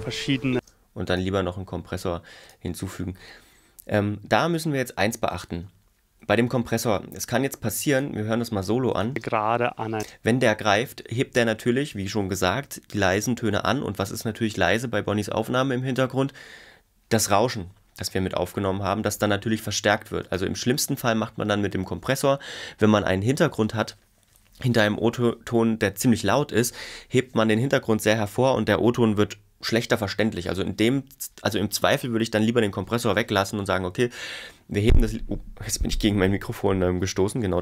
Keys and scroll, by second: 9.1 space.